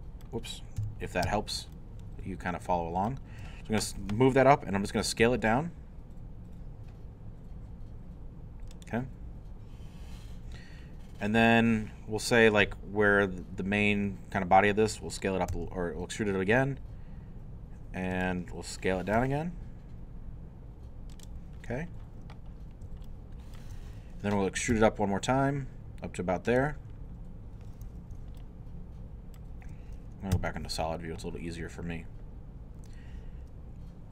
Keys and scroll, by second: 0.8 alt+i, 5.2 s, 15.5 e, 19.2 s, 24.8 e, 30.3 shift+z.